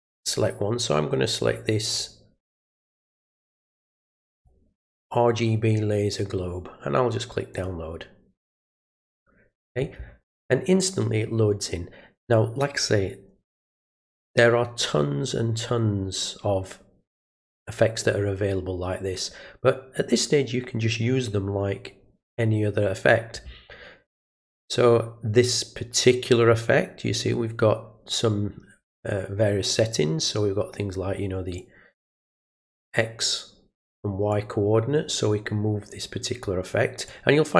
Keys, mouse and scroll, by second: 1.9 click, 4.4 click, 7.5 click, 31.6-32.7 drag, 33.0 click, 34.3-36.4 drag, 37.1 click.